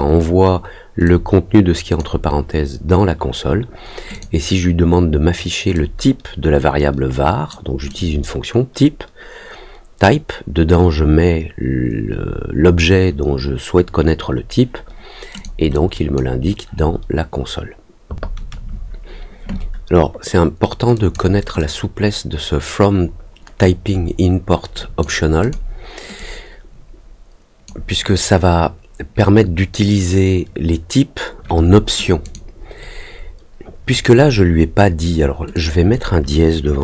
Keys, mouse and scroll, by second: 1.0 click, 4.1 click, 5.7-7.4 drag, 7.8 click, 15.3 click, 15.7 click, 20.9 click, 21.5-24.9 drag, 25.3 click, 26.1-27.6 drag, 32.2 click, 35.5 click.